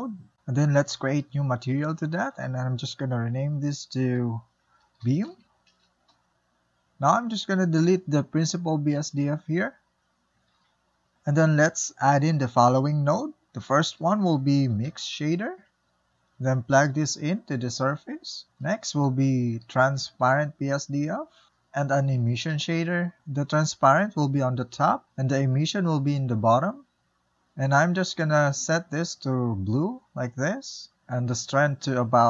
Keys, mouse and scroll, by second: 0.2 click, 2.0-7.7 drag, 9.9 click, 10.2 Delete, 17.7 click, 23.9-25.5 drag, 26.7 click, 27.0 click, 31.0 click.